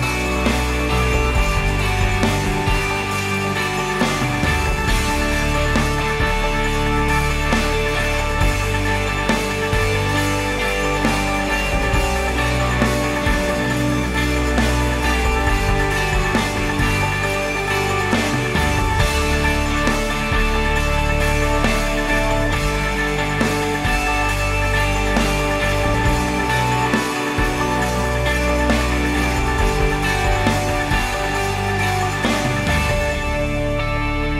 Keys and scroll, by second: 1.6 ctrl+c, 6.4 ctrl+v, 9.2 +, 10.7-12.3 typing, 13.3 Return, 16.1 ctrl+s.